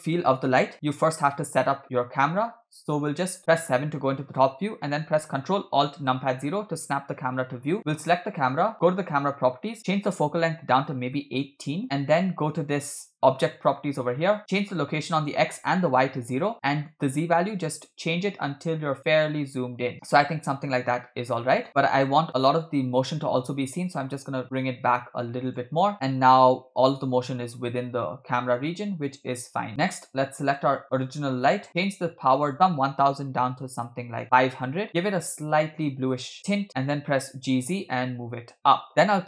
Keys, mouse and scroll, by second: 1.9-2.7 scroll down 2, 3.5 KP_7, 6.1 ctrl+alt+KP_0, 7.8 click, 10.0-11.8 drag, 13.5 click, 14.8-16.4 shift+drag, 16.9-20.0 drag, 20.5-21.0 scroll down 1, 21.0 scroll down 2, 21.1 scroll up 1, 21.6 scroll up 1, 21.7 space, 22.5 space, 22.8 space, 23.9-25.7 drag, 30.4 click, 31.7 click, 32.3-34.6 drag, 34.2 0, 35.0 click, 36.9 g.